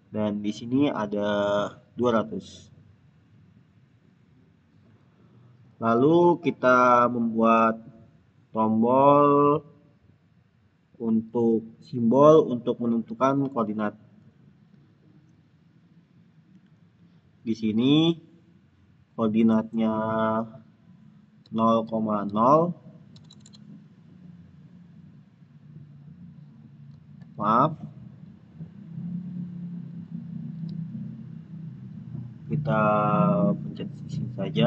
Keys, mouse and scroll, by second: 0.3 click, 4.4 click, 7.4 click, 13.8 click, 17.2 click, 21.3 click, 21.7-22.1 typing, 24.2 click, 26.8 click, 27.1 ctrl+z, 28.9 click, 29.9 ctrl+z, 34.0 ctrl+z.